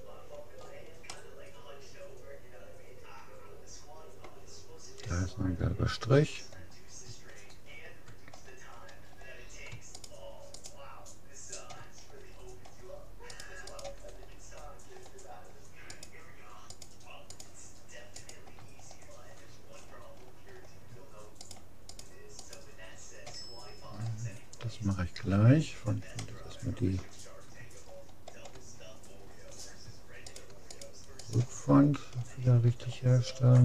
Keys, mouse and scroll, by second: 6.8 middle click, 7.3-8.7 scroll up 1, 8.8-10.9 middle drag, 10.1-12.3 right drag, 12.0-13.3 middle drag, 13.3-14.7 right drag, 14.3 click, 14.7 middle click, 14.9 click, 14.9 right click, 15.5 middle click, 15.9 click, 15.9-19.8 right drag, 19.8-21.5 middle drag, 21.5-24.1 right drag, 26.3-30.3 middle drag, 30.3-32.9 right drag, 32.9-33.6 middle drag.